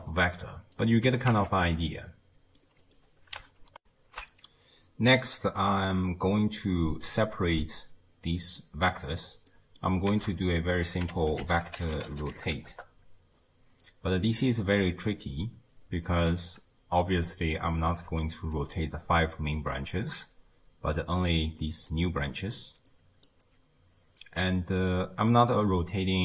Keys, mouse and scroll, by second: 0.1 click, 1.1 g, 1.9 middle click, 2.8 click, 4.8 ctrl+alt+shift+q, 6.3-8.9 middle drag, 8.9-9.4 scroll up 1, 9.4 scroll up 2, 9.5 middle click, 10.1 ctrl+a, 17.4-18.6 shift+middle drag, 18.6 d, 18.7 click, 19.6 d, 20.8-23.4 typing, 21.6 click, 22.3 click, 22.9 click, 24.5 click.